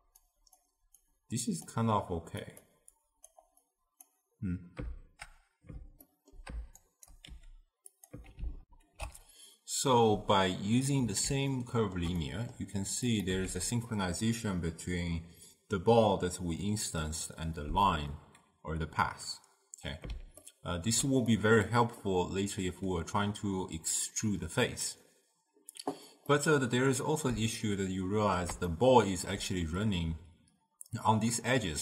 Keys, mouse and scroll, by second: 7.2 shift+right click, 8.7 ctrl+alt+shift+q, 11.6-13.2 ctrl+middle drag, 13.2 click, 13.4 x, 20.5-24.4 ctrl+middle drag, 26.4-31.8 middle drag.